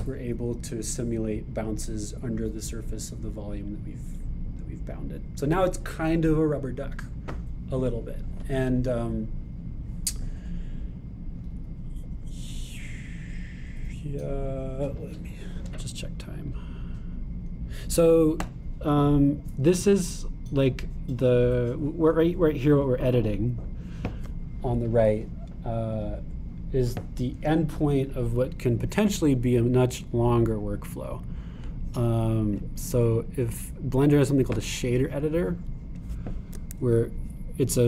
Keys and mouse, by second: 23.7-25.1 drag, 29.8-33.8 drag, 33.8-37.1 right drag, 37.1 click.